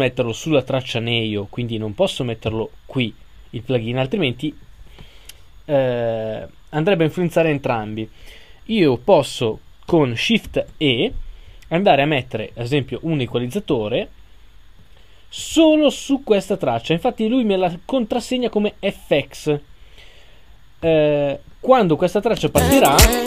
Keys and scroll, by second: 10.5 shift+e.